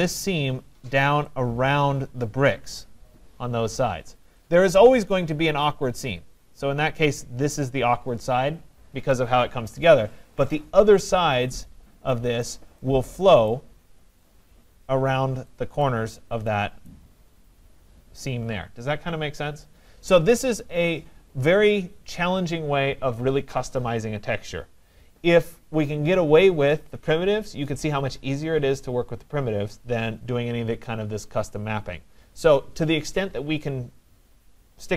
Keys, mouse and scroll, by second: 4.4 right click, 5.7 right click, 12.4 right click, 13.7 right click, 15.9 right click, 16.1 scroll, 16.9 right click, 17.3 middle click, 17.3-22.3 middle click, 20.3-21.1 scroll.